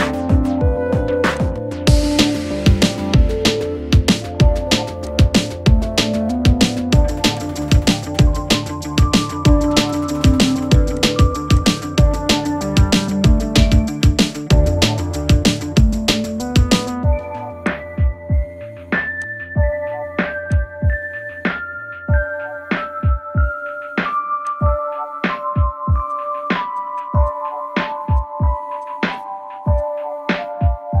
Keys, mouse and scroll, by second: 1.3-5.1 drag, 7.4 click, 9.1 right click, 11.0 click, 12.9 ctrl+=, 15.4 ctrl+-, 17.6-20.5 drag, 22.5-23.0 typing, 25.7 typing, 28.0 click, 28.8 alt+click, 29.1 space, 29.1 click, 29.2 space, 29.7-31.0 drag.